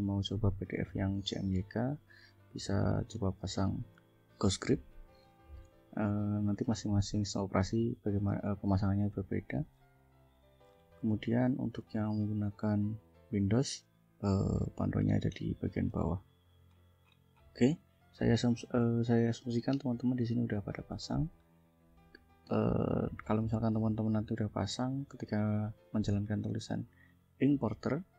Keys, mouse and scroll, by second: 1.3 click, 2.5-3.6 drag, 5.5 scroll down 2, 6.3 scroll up 1, 8.6-9.6 drag, 9.8-11.8 scroll down 8, 12.1 scroll down 2, 12.8 scroll down 2, 14.3-16.1 drag, 16.3 scroll down 2, 16.7-18.4 scroll up 5, 22.5 click, 23.3 click, 25.9 click, 26.8 click, 27.5-28.1 drag.